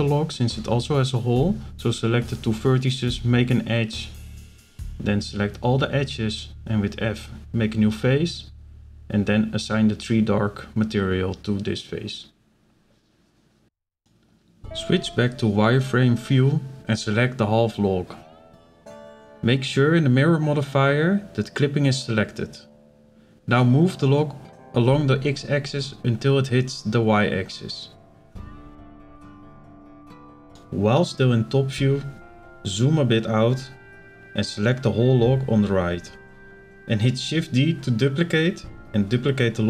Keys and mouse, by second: 0.9-2.1 shift+drag, 2.2 click, 2.5 middle click, 2.9 shift+middle click, 6.8 f, 9.2 click, 10.4 shift+middle click, 11.1 middle click, 12.3 shift+middle click, 12.8-14.6 middle drag, 14.6 z, 15.9 b, 16.8 middle click, 17.6 KP_7, 19.0 click, 20.7 click, 21.5 click, 22.3 shift+middle click, 23.2 shift+middle click, 24.2-26.9 drag, 27.7 click, 28.0 click, 30.0 shift+middle click, 31.1 shift+middle click, 32.6 b, 34.7 shift+d, 35.7-39.6 drag.